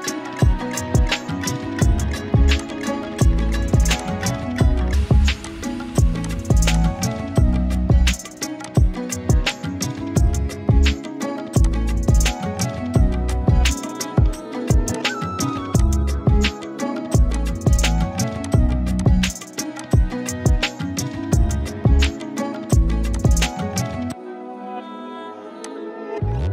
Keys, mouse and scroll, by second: 1.0 ctrl+z, 2.6 click, 4.0-7.4 shift+drag, 9.4 shift+click, 12.6 click, 15.8 shift+click, 19.0-19.6 click, 19.6-22.4 typing, 19.8-21.9 click, 22.0 click, 23.1 click, 23.7-24.8 scroll down 1, 24.8 right click, 25.6 click.